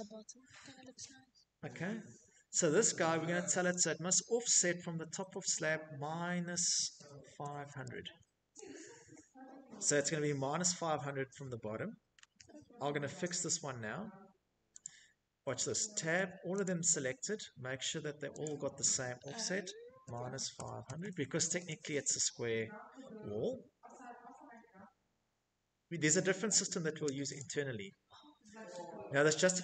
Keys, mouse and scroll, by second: 0.6 middle click, 0.7 middle click, 1.6 shift+middle click, 1.7 click, 4.6-6.8 typing, 10.8 Escape, 11.2 Escape, 12.7 click, 13.9 Tab, 17.6-19.4 typing, 19.5 Return, 24.7 Escape, 25.2 Escape, 25.5 click, 25.9 middle click, 26.1 middle click, 27.1 middle click, 27.3 middle click, 27.4 middle click, 27.5 middle click, 28.5 middle click, 28.6 middle click, 29.0 middle click, 29.1 middle click, 29.1 middle click, 29.3 middle click.